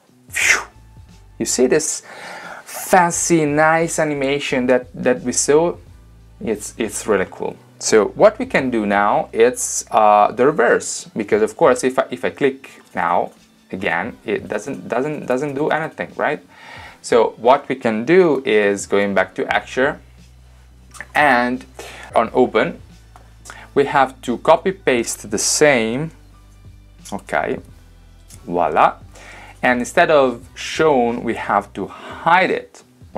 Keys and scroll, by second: 18.4 super+Tab, 26.1 super+c, 28.3 super+v.